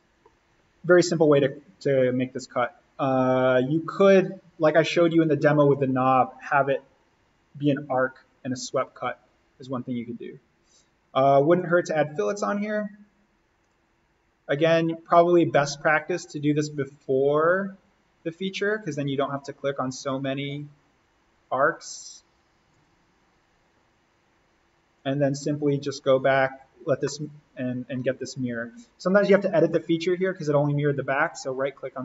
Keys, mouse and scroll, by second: 0.2-1.9 scroll up 1, 11.5-26.9 drag, 26.9 scroll up 1, 27.0 middle click, 27.1 scroll, 29.5-29.9 scroll up 2, 29.7 middle click, 31.1 right click.